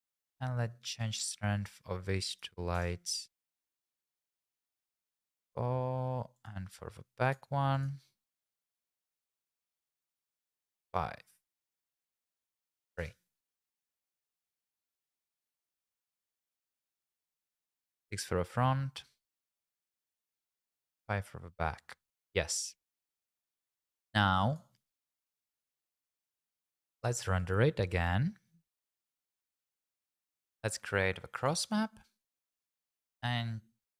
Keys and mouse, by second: 0.9-2.9 drag, 3.6 click, 6.4 click, 7.3 click, 7.8 click, 8.2 click, 8.7 click, 10.0 click, 12.2 click, 14.5 click, 16.9 click, 17.6 right click, 19.2 click, 20.1 click, 25.2 click, 27.3-29.7 drag, 33.9 click.